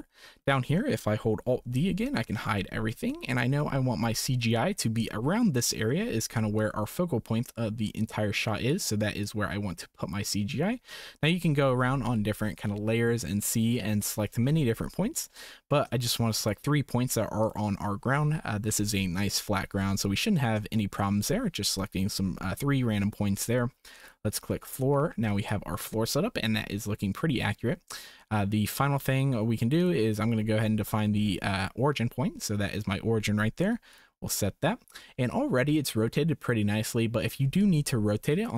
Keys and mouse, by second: 0.1 shift+middle click, 1.5 alt+d, 3.2 shift+click, 7.3-10.7 drag, 10.9 shift+click, 15.2-15.9 drag, 16.4-17.2 shift+drag, 17.4 shift+click, 20.9 shift+click, 24.1-27.1 drag, 29.8 click, 34.0-35.2 drag.